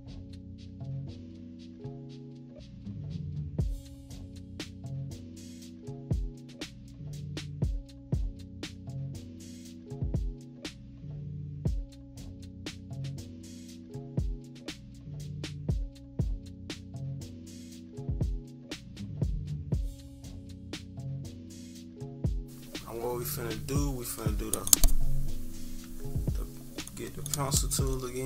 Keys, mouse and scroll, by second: 4.4 click, 7.6 -, 7.7 click, 7.8 -, 7.9 =, 8.1 =, 8.3 click, 9.6 click, 9.7 click, 10.5 click, 13.1 click, 16.9 click, 17.4 click, 18.2 -, 18.3 scroll up 2, 18.7 =, 18.8 scroll down 2, 19.0 click, 19.6 click, 20.5 -, 20.7 click, 20.9 click, 21.7 click, 22.3 -, 22.3-23.2 scroll up 4, 25.8 click.